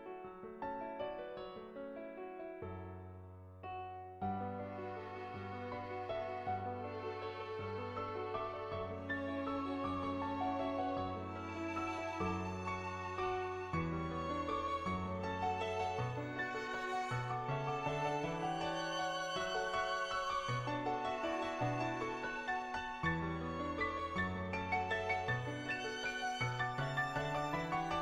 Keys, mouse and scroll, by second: 0.4-1.4 middle drag, 2.2 middle click, 3.0 shift+click, 3.9-4.9 shift+drag, 5.5 shift+click, 6.3 shift+click, 7.4 click, 8.7 click, 11.8 middle click, 12.7 middle click, 14.1 click, 15.1 ctrl+z, 16.8-18.7 drag, 19.0-21.9 drag, 23.9 click, 24.8 shift+click, 26.8 shift+click.